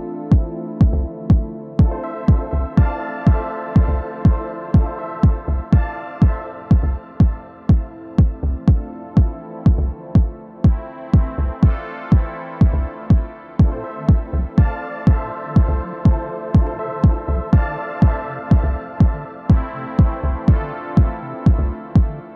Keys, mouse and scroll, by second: 0.5 shift+f, 0.7-2.7 drag, 1.6 ctrl+z, 2.3 middle click, 3.0 f, 3.2-4.2 drag, 4.2 middle click, 4.6-7.2 drag, 4.7 ctrl+z, 5.9 middle click, 7.2 middle click, 9.2 shift+7, 10.5 middle click, 11.0-13.6 drag, 12.2 ctrl+z, 13.9 alt+w.